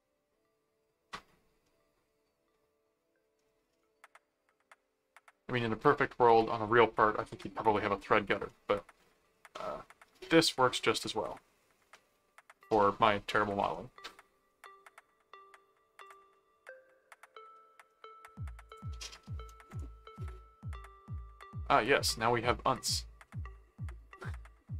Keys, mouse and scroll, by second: 3.4-4.7 middle drag, 8.4 middle click, 9.5 middle click, 10.5 middle click, 11.9 middle click, 12.9 middle click, 13.7 middle click, 14.5 middle click, 16.0 click, 16.3 middle click, 17.5 middle click, 18.7 click, 23.3 middle click.